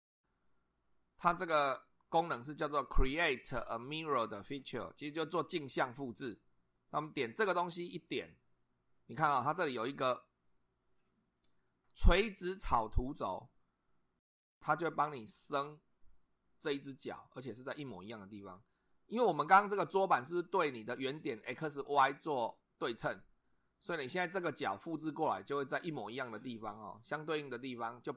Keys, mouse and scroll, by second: 7.3 click, 14.5-15.9 middle drag, 17.3-18.7 middle drag.